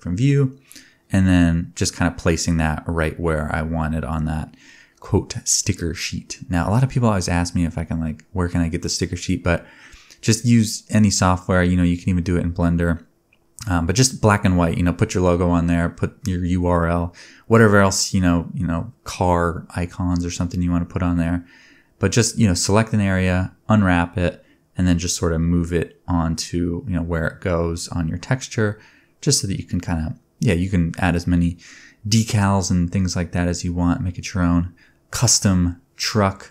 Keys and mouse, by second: 1.1 b, 2.7 s, 3.5 g, 3.6-7.1 drag, 4.3 Tab, 5.3 Tab, 5.8 a, 6.1 g, 7.2 g, 11.2-12.4 drag, 12.4 shift+middle click, 12.5 shift+click, 12.6-15.2 shift+middle drag, 12.7 click, 15.2 click, 15.3 middle click, 15.8 3, 16.3 alt+a, 16.4 c, 18.7 u, 19.8 a, 19.9 r, 20.8-28.5 drag, 20.8 g, 22.3 r, 23.8-25.8 typing, 26.9 Tab, 27.3 KP_0, 28.5-30.1 shift+middle drag, 30.1-32.1 ctrl+shift+drag, 33.0 space, 33.4 space, 34.9 click, 35.1 middle click, 36.0 shift+a.